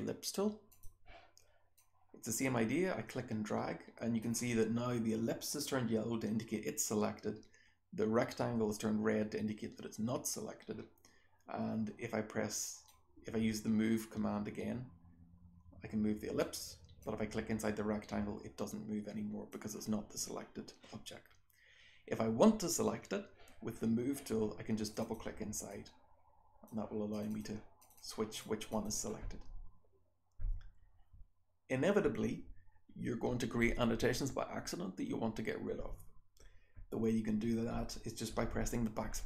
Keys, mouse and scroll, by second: 0.6 click, 1.7-4.2 drag, 12.8-16.3 drag, 17.0-19.4 drag, 24.8 click, 24.9-25.7 scroll down 1, 25.0 click, 25.7-26.6 drag, 25.7-26.6 scroll down 1, 27.1 click, 27.1-37.7 scroll down 2, 27.3 click, 27.7 click, 27.9 click, 28.3 click, 28.7 click, 37.7-39.2 scroll down 1, 37.7 BackSpace.